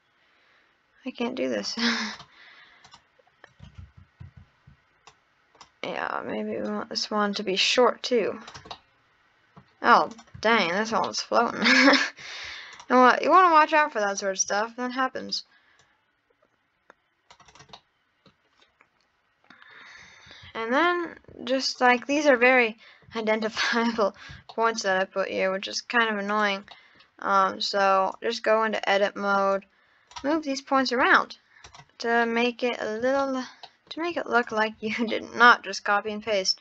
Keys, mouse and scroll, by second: 2.1 click, 2.8 click, 3.8 ctrl+z, 4.2 ctrl+z, 5.0 click, 6.6 click, 8.7-10.1 middle drag, 10.1 click, 10.6 shift+drag, 10.9-11.3 scroll up 1, 11.6-12.3 middle drag, 12.3-12.8 scroll down 1, 12.8 shift+drag, 13.2 shift+click, 14.0 shift+click, 14.6-15.8 middle drag, 15.8 click, 17.5 click, 17.8-18.6 middle drag, 18.6-19.4 scroll down 1, 19.6 scroll up 3, 20.1 Tab, 20.5 Tab, 20.8 click, 21.8 shift+click, 22.5-23.5 middle drag, 23.7 scroll up 3, 24.0 Tab, 24.4 shift+scroll up 1, 24.5 shift+middle click, 25.2 scroll up 3, 26.3 click, 26.7 scroll up 1, 26.7 middle click, 27.3 scroll down 3, 28.1 click, 29.6 click, 31.0 Tab, 31.7 click, 32.2-33.0 middle drag, 33.0 scroll down 1, 33.2 shift+middle click, 34.0 shift+scroll up 1, 34.3 click, 35.1-35.9 shift+scroll up 5, 35.1 shift+middle click.